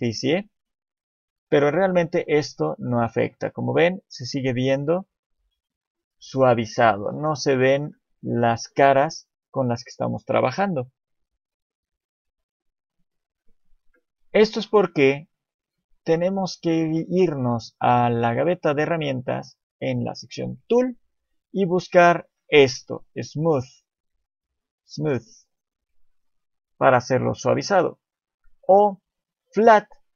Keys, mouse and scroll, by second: 1.5 click, 3.5-4.0 scroll up 1, 12.5 click, 19.7 click, 26.1 click, 29.9 click.